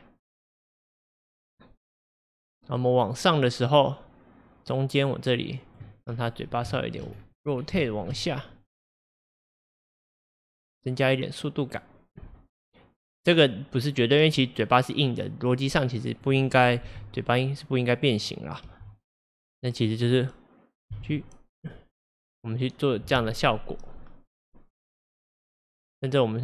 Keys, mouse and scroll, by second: 6.1-6.5 scroll, 6.7-7.2 shift+middle drag, 7.2-7.6 scroll, 7.9-8.9 shift+middle drag, 8.9 click, 16.9 g, 18.7 g, 25.0-26.4 drag.